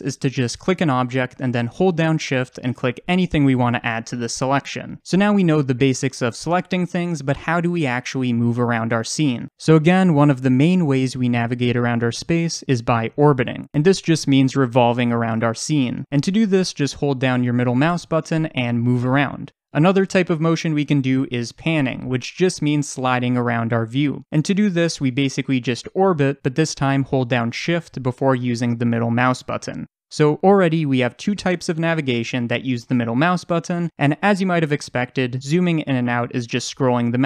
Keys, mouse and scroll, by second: 2.6 shift+click, 3.8 shift+click, 5.3 click, 17.5-24.4 middle drag, 24.5-37.2 middle drag, 36.3-37.0 scroll down 2, 37.0-37.2 scroll up 2.